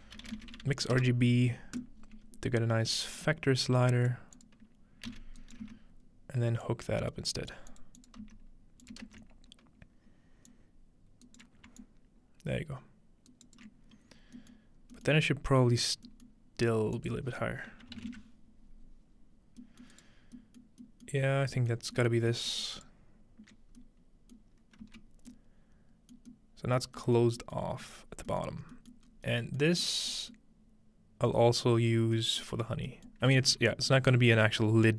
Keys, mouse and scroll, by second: 0.1-1.4 typing, 1.8 click, 2.3-3.2 scroll up 1, 3.2-4.3 drag, 4.4 click, 5.1 c, 5.4 click, 5.4 right click, 5.6 x, 6.6-7.5 drag, 7.7 click, 8.0 click, 8.2 x, 8.8 click, 9.2-11.5 drag, 11.2 right click, 11.8-13.6 shift+drag, 13.3 shift+right click, 14.1 scroll down 2, 14.4 middle click, 14.6-14.9 scroll up 3, 14.9 middle click, 15.1 middle click, 16.3-17.8 middle drag, 17.0 click, 19.1-19.9 scroll down 1, 19.9 middle click, 20.0 right click, 20.7 middle click, 21.1 middle click, 21.4 scroll down 1, 22.1 shift+middle click, 22.8-24.7 alt+shift+drag, 24.8 z, 26.5-27.0 scroll down 1, 27.0 scroll up 1, 27.8 alt+middle click, 28.4 alt+middle click, 29.1-30.8 scroll up 2, 31.7-32.6 scroll up 2, 32.4-34.9 middle drag, 32.6-34.3 scroll down 1.